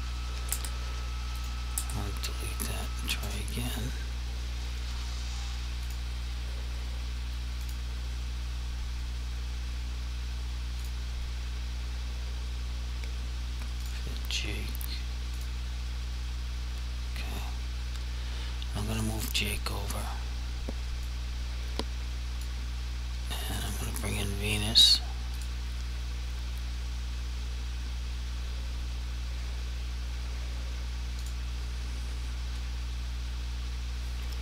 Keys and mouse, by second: 0.6 Delete, 1.5 right click, 1.8 Delete, 3.8 click, 10.9 click, 13.8 click, 19.0 click, 21.2 click, 25.4 click, 31.3 click.